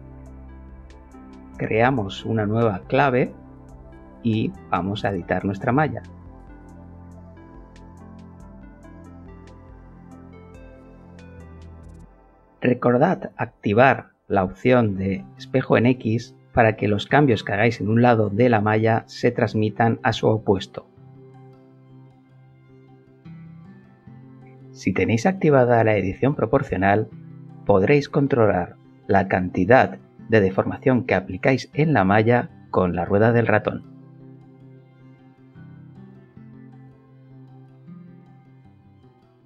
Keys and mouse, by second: 0.1 a, 2.1 Tab, 2.8 middle click, 5.9 click, 8.9 click, 10.8 click, 12.5 click, 14.9-18.2 alt+middle drag, 19.9-21.2 shift+middle drag, 21.9 shift+middle click, 26.0 shift+click, 27.8 g, 28.5-29.9 middle drag, 33.6 click, 35.0 click, 36.5 g, 36.8-37.8 middle drag, 38.3 middle click.